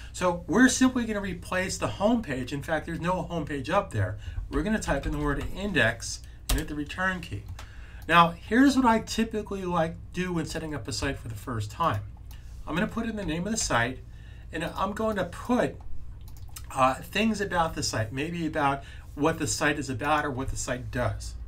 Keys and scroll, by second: 4.1-5.8 typing, 13.4 super+v.